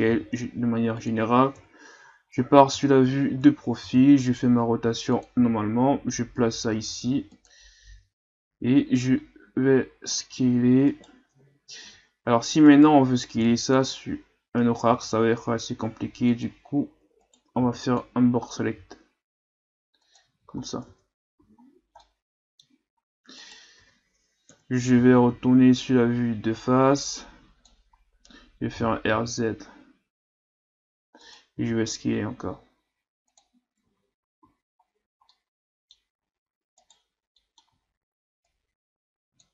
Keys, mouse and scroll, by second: 0.0 s, 1.5 KP_3, 2.3-3.4 scroll up 8, 3.8 r, 5.3 g, 10.2 s, 11.8 z, 12.7 right click, 13.3 b, 14.9 g, 17.2 right click, 17.6 b, 18.8 g, 20.3 z, 20.7 scroll down 1, 20.9 Tab, 21.4 a, 21.6-22.0 scroll down 4, 22.0-22.9 middle drag, 22.9-23.4 scroll up 1, 23.4 right click, 23.8 Tab, 24.5 KP_1, 25.0 a, 25.3 a, 25.9-27.9 drag, 27.9-28.8 scroll up 1, 28.8 r, 31.5 s, 33.8 Tab, 34.4 a, 34.8-35.3 scroll down 2, 35.3-36.1 middle drag, 36.1-36.8 scroll up 2, 36.8 right click, 37.4 middle click, 37.7 Tab, 38.4 click.